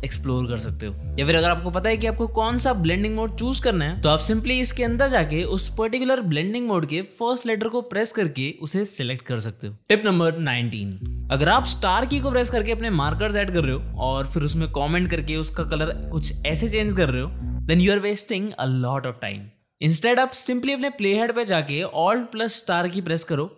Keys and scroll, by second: 1.6 shift+=, 5.8 d, 8.8 Return, 12.7 KP_Multiply, 14.6-15.9 typing, 22.3 alt+KP_Multiply.